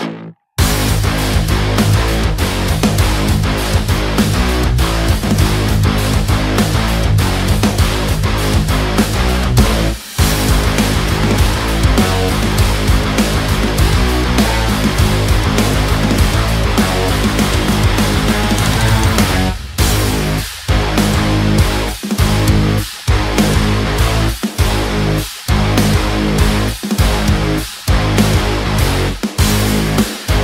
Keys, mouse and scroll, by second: 0.3 space, 0.4 click, 4.8 space, 4.9 click, 5.2 space, 5.3 ctrl+click, 5.6 space, 5.7-8.3 drag, 8.3 space, 8.3 click, 8.5 space, 10.1 space, 10.6 click, 13.1 space, 13.3 click, 13.7 click, 16.8 ctrl+click, 17.2 ctrl+space, 18.2 ctrl+space, 18.9-20.3 drag, 22.1 v, 22.3 click, 23.8 b, 24.1 click, 25.5 z, 26.6 click.